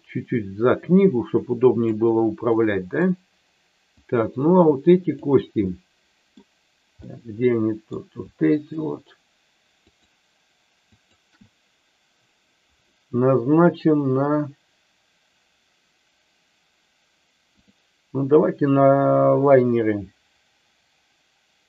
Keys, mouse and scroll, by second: 2.5 middle click, 3.9-5.3 drag, 5.6 middle click, 7.1 middle click, 8.5 shift+click, 9.9 shift+click, 10.9 shift+click, 17.5-21.6 drag.